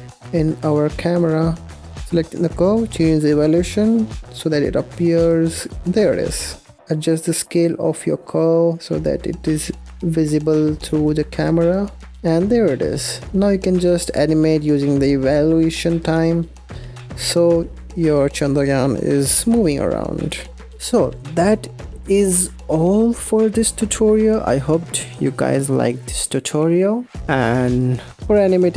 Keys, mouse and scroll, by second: 0.4-1.4 scroll down 4, 1.5 click, 1.9 scroll up 1, 2.0 click, 3.2-5.9 shift+drag, 5.9-6.5 scroll up 5, 6.8 s, 7.3 g, 10.4-10.8 scroll down 1, 10.8-11.4 shift+middle drag, 11.4-12.0 scroll up 1, 12.0 scroll down 1, 12.1 shift+middle click, 12.7-13.1 scroll up 1, 13.1-13.9 scroll down 1, 13.9-14.6 scroll down 1, 14.7-20.6 shift+drag, 20.6 ctrl+s, 27.5 click, 28.6 click.